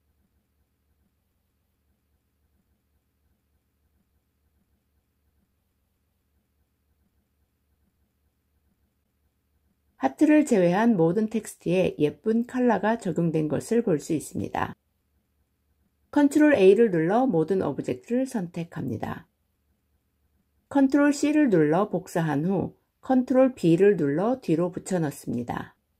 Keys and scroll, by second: 16.0 ctrl+a, 20.8 ctrl+c, 23.2 ctrl+b.